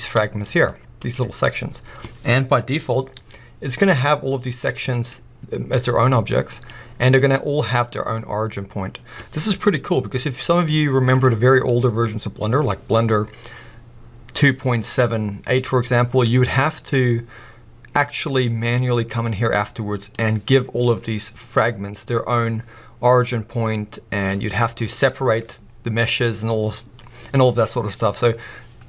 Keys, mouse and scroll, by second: 0.7 scroll up 2, 1.0 click, 1.5-3.1 scroll up 2, 3.1 g, 4.5 right click, 4.9 click, 5.7 g, 6.6 right click, 6.8-7.3 scroll up 3, 7.3-9.1 scroll down 2, 9.1-11.7 scroll down 1, 11.7-20.1 middle drag, 19.0-19.8 scroll down 1, 20.1 click, 23.2-27.3 scroll up 1, 28.7-28.8 scroll down 1.